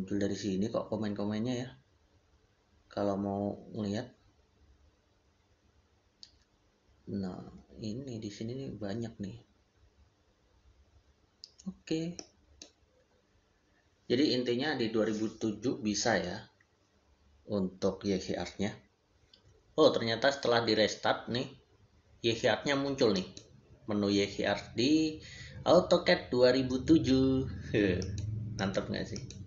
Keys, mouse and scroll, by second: 12.0 Return, 12.1 click, 23.0 click, 27.8 click.